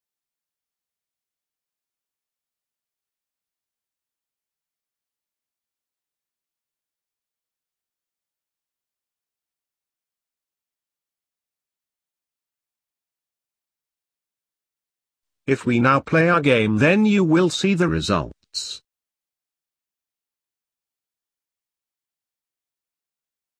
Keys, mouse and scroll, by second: 5.0 scroll up 1, 5.1-6.0 scroll down 4, 6.0-6.6 middle drag, 6.6 scroll down 2, 7.6 click, 8.2 click, 8.8 KP_Decimal, 9.4-10.3 scroll up 14, 10.3-12.1 middle drag, 12.1-20.1 drag.